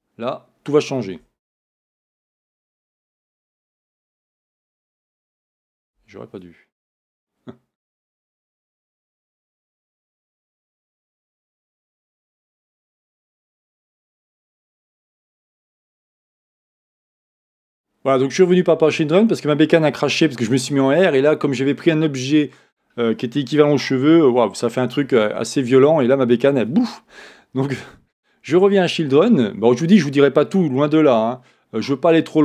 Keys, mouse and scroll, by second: 11.9-13.4 scroll down 1, 17.6 click, 31.2-32.4 scroll down 1.